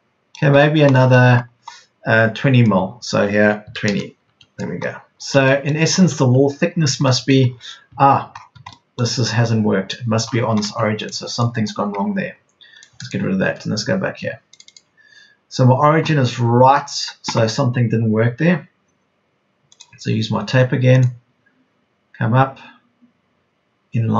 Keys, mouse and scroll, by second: 3.6 KP_2, 3.8 KP_0, 5.9 space, 6.3 Escape, 11.4 Delete, 13.4 Delete, 21.9 Delete.